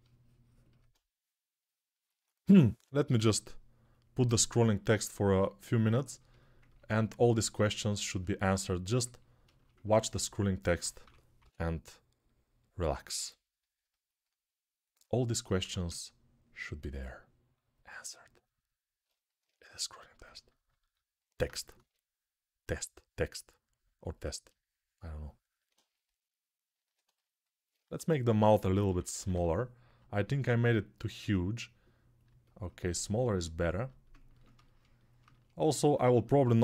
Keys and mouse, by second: 2.3-8.0 drag, 10.6-33.8 drag, 10.8 3, 11.2 [, 11.3 [, 15.3 1, 21.5 x, 27.7-29.1 typing, 34.2 alt+shift+click, 34.5-35.5 alt+shift+drag, 36.2 alt+click.